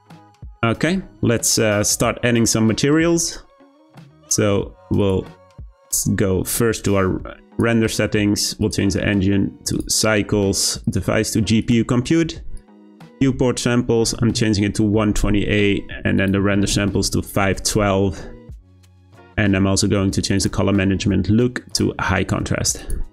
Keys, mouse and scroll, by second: 0.6-1.9 scroll up 1, 1.9 click, 5.0 click, 7.5 click, 8.6-15.6 drag, 16.2-18.6 drag, 19.0-20.3 scroll down 7, 20.3-20.7 drag, 20.7-21.7 scroll down 2, 21.7-23.1 drag.